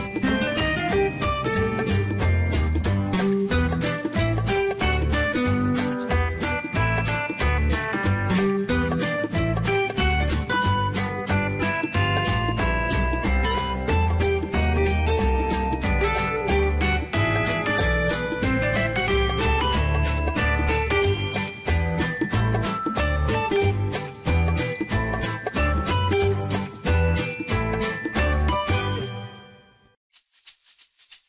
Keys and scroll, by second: 8.7 0, 9.0 Return, 14.7 ctrl+c, 22.4 ctrl+v.